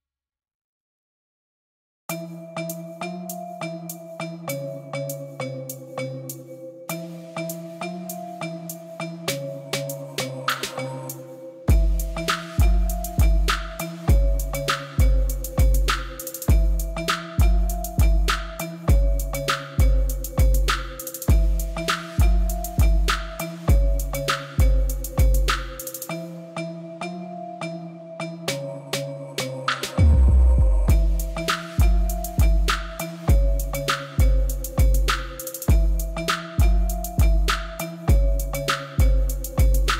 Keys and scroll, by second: 0.8 b, 1.1 shift+z, 3.9 b, 7.0 shift+z, 8.5 shift+z, 9.9 shift+z, 11.4 shift+z, 11.8 Tab, 14.7 Tab, 15.7 shift+z, 17.4 shift+z, 19.8 Tab, 25.5 Tab, 26.6 3, 27.1 shift+d, 27.3 Escape, 28.4 s, 29.5 2, 30.4 alt+a, 33.1 3, 33.4 ctrl+z, 33.6 l, 35.3 s, 37.2 ctrl+z, 38.2 ctrl+b, 39.7 l.